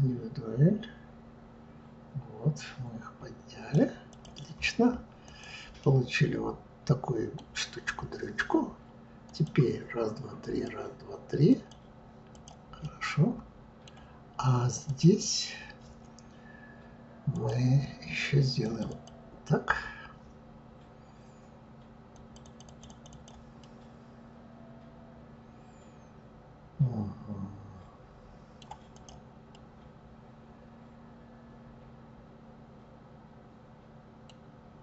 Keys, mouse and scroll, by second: 4.1 click, 5.2 click, 5.8-7.2 middle drag, 9.2 click, 10.4-12.0 drag, 12.3 click, 12.8-14.9 middle drag, 14.9 click, 17.3-18.8 drag, 18.9 click, 22.1 click, 22.4 click, 22.6 click, 22.9 click, 23.1 click, 23.6-26.6 middle drag, 28.9 click, 29.5-32.5 middle drag, 34.1 middle click, 34.6-34.8 scroll down 2.